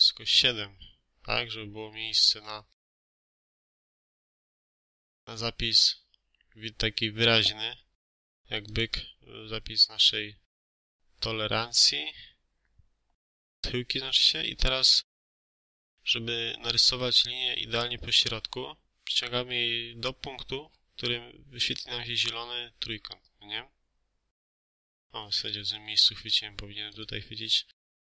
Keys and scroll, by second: 2.6 4, 2.7 5, 3.4 7, 3.9 Return, 5.1 Escape, 24.9 Escape, 25.3 space.